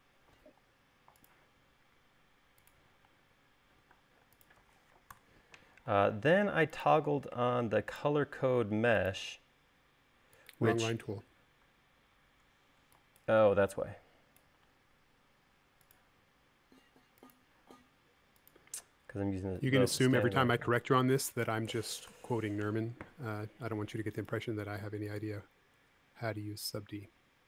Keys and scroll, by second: 5.6 BackSpace, 11.3 e, 15.0 l, 21.5 space.